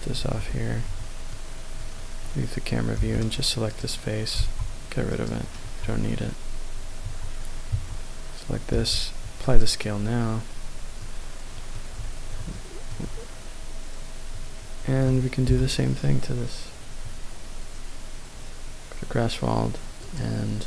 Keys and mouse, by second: 0.3 Tab, 0.9 Tab, 1.3 middle click, 3.0 3, 3.2 click, 3.7 click, 4.4 x, 5.7 Tab, 7.1 Tab, 7.8 Tab, 8.7 ctrl+a, 11.7-12.4 middle drag, 12.6-13.0 shift+middle drag, 15.4 n, 20.0 click.